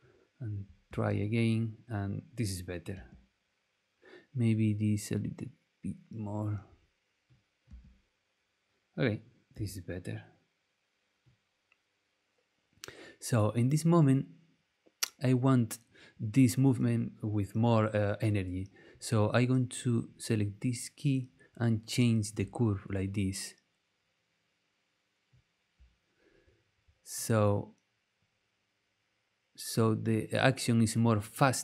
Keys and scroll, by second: 0.9 space, 2.9 space, 7.7 space, 9.5 space.